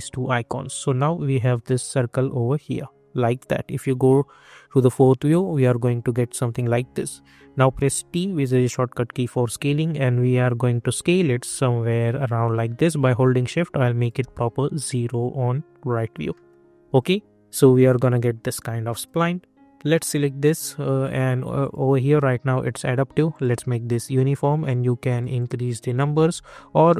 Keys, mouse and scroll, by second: 1.6 middle click, 7.6 t, 9.1-14.9 drag, 16.3 middle click, 16.9-18.9 alt+drag, 26.1 ctrl+z, 26.7 ctrl+z.